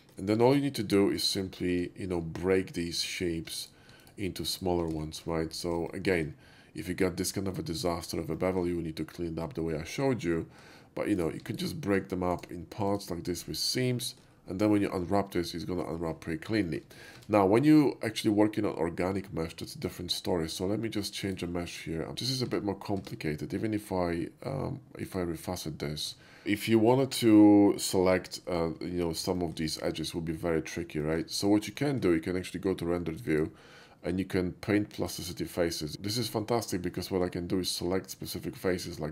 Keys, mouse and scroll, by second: 0.0 shift+middle click, 1.4 middle click, 1.4 click, 1.9 shift+middle click, 3.0 alt+click, 3.7 alt+click, 4.6 alt+click, 5.1 shift+middle click, 5.9 shift+middle click, 8.4 shift+middle click, 10.4 shift+middle click, 11.2 shift+click, 11.6 alt+click, 12.4 alt+right click, 12.9 alt+click, 13.4 alt+middle click, 14.0 shift+middle click, 14.1 shift+middle click, 14.4 shift+middle click, 16.7 shift+middle click, 17.2 Tab, 19.9 click, 21.3 click, 22.1 shift+middle click, 22.5 Tab, 23.2 Tab, 25.1 click, 26.4-27.0 shift+middle drag, 28.7 shift+middle click, 29.4 shift+middle click, 29.5 shift+middle click, 29.9 shift+middle click, 31.1 shift+middle click, 31.8 shift+middle click, 33.4 shift+click, 35.1 click, 37.7 click, 39.0 shift+middle click.